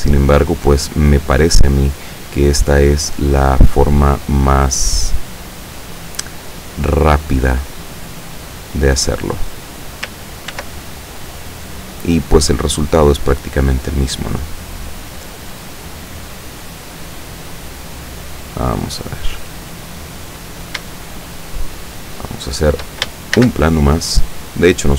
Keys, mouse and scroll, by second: 1.4 click, 1.9 right click, 2.5-6.3 drag, 7.1 right click, 7.5-9.8 drag, 10.6 ctrl+r, 11.7 click, 12.7 click, 14.0 right click, 14.8-16.6 drag, 17.1-19.0 drag, 19.4 click, 21.2-23.1 shift+middle drag, 23.4 shift+a, 24.2 click.